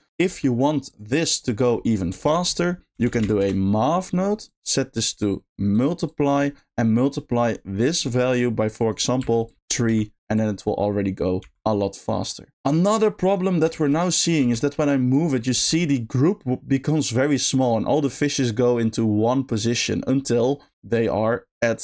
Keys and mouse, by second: 0.3 g, 1.9 click, 2.2 shift+a, 4.9-5.8 drag, 6.1 click, 8.8 click, 11.4 g, 11.9 click, 13.8 shift+middle drag, 14.0 middle drag, 15.2 click, 15.6 g, 19.6 click.